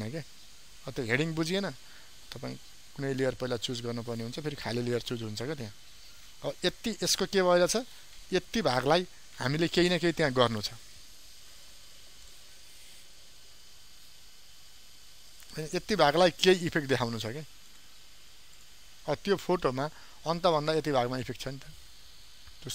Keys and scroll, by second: 10.6 ctrl+m, 19.6 ctrl+d.